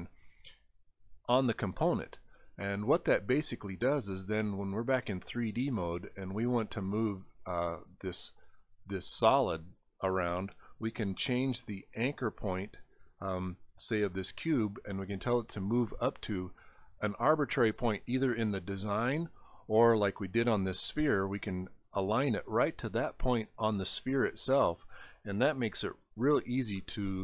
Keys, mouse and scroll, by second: 4.5 click, 6.3 click, 7.7 click, 8.9 click, 10.7-13.1 drag, 15.5 click, 17.0 click, 19.5 click, 21.2 click, 22.3-23.1 scroll up 3, 23.9 middle click, 26.8 middle click.